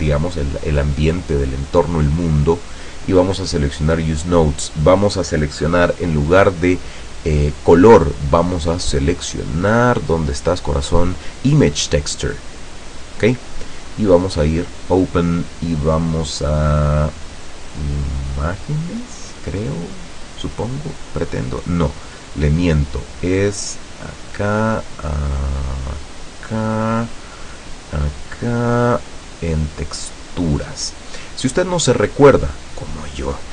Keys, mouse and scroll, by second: 2.6 click, 7.6 click, 12.9 click, 14.4 click, 19.2 click, 24.0 click, 24.8 click, 25.6 click, 26.0 click, 28.1 click, 29.0 click, 30.5 click.